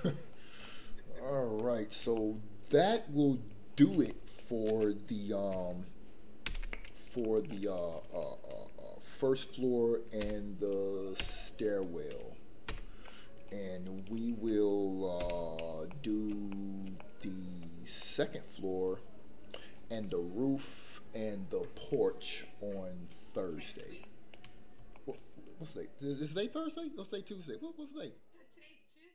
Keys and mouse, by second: 0.6-1.6 middle drag, 2.1 shift+middle click, 3.0 middle click, 4.1-4.4 shift+middle drag, 6.7 alt+h, 7.2 middle click, 7.6 click, 10.2 h, 12.1 click, 12.1 h, 13.1 middle click, 13.1 h, 15.2 h, 15.8 middle click, 16.5 shift+middle click, 17.0 middle click, 18.0-19.7 middle drag, 24.0 shift+middle click, 25.0 shift+middle click.